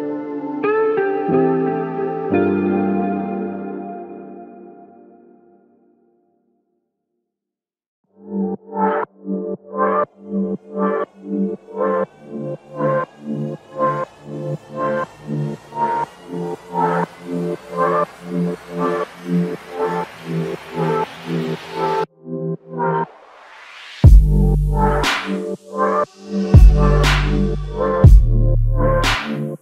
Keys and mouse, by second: 3.6 shift+click, 16.0 alt+click, 16.9-17.3 typing, 19.1 ctrl+alt+click, 22.5 typing, 25.8 double click.